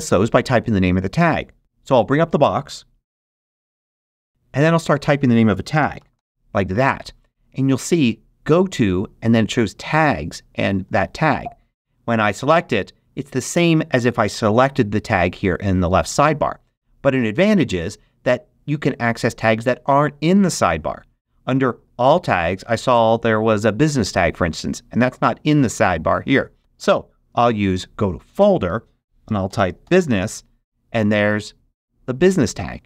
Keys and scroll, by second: 5.5-6.6 typing, 27.6 shift+super+g, 29.0-30.5 typing.